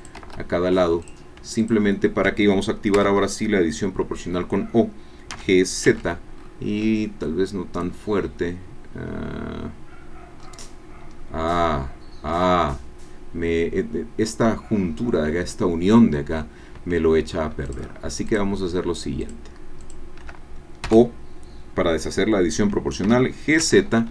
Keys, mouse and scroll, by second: 0.2 Escape, 1.0 click, 1.9 shift+click, 2.9 o, 5.3 g, 5.9 z, 6.4-7.1 scroll up 2, 10.0 scroll down 1, 10.4-10.8 scroll up 1, 11.2 scroll up 1, 12.3 Escape, 17.6 shift+click, 18.3 shift+click, 19.5 shift+click, 19.8 shift+click, 20.8 o, 23.6 z.